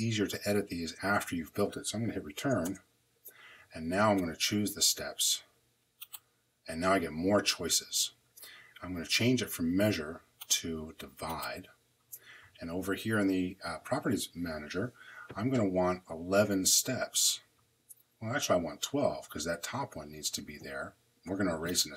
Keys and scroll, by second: 2.5 Return.